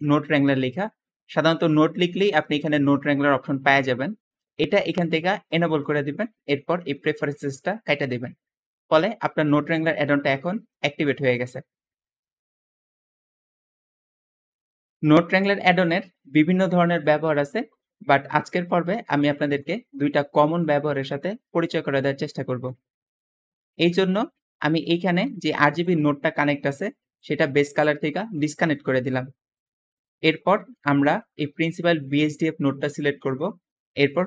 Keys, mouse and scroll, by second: 15.3 middle click, 15.3-16.0 scroll down 2, 16.2-17.3 scroll up 2, 17.3 middle click, 18.0-18.9 scroll down 2, 18.2 middle click, 19.3 middle click, 20.6 middle click, 20.6-21.5 scroll up 2, 21.8-22.7 scroll down 2, 22.9 middle click, 23.3-24.2 scroll up 2, 23.4 middle click, 25.0 g, 28.7 g, 30.7-31.4 middle drag, 30.7 scroll down 2, 31.0-31.4 scroll up 2, 32.1-33.3 middle drag, 32.1-33.3 scroll down 2, 33.6 middle click, 33.6-34.2 scroll up 2.